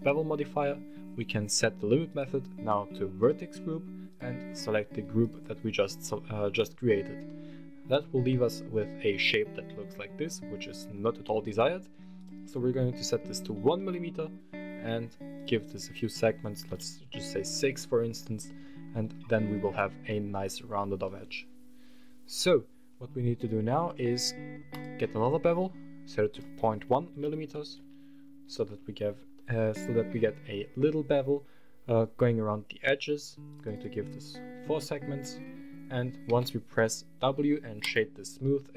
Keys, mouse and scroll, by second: 1.8-3.2 drag, 3.8-5.2 drag, 6.5-6.9 scroll down 1, 7.0-10.7 middle drag, 11.9-14.3 drag, 15.1-17.0 drag, 17.2 scroll down 2, 17.5 middle drag, 17.8 scroll up 2, 18.2 middle drag, 18.5 scroll up 2, 19.8 middle drag, 20.4-20.9 scroll down 2, 20.8-22.3 middle drag, 24.6 drag, 25.0 middle drag, 25.3 scroll up 1, 26.1-27.6 drag, 28.0 scroll up 1, 28.3 middle click, 28.8 scroll up 1, 29.1 middle click, 30.1-31.0 scroll down 1, 33.2 click, 33.6 click, 36.0 w, 38.2-38.7 middle drag.